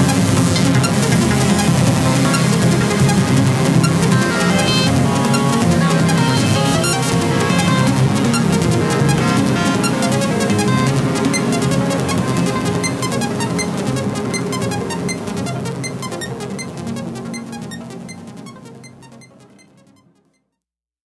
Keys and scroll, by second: 2.1 ctrl+=, 9.4 ctrl+-, 15.7 space.